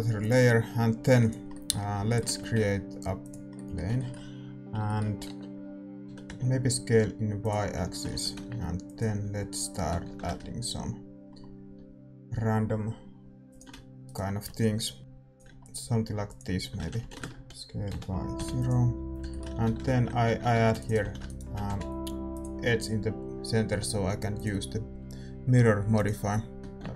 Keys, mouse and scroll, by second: 1.5-10.0 middle drag, 3.2 shift+a, 5.2 Tab, 6.0 s, 8.1 a, 8.4 ctrl+r, 10.0 ctrl+b, 14.0 right click, 15.0-17.4 drag, 15.0 e, 17.0 g, 17.4-19.2 right drag, 17.4 r, 17.4 s, 19.2-21.2 middle drag, 19.5 a, 19.8 ctrl+shift+r, 20.5 ctrl+r, 21.0 a, 21.2-26.0 right drag, 22.4 x, 26.0 click, 26.6-26.9 middle drag, 26.6-26.9 right drag, 26.6 a, 26.8 ctrl+b.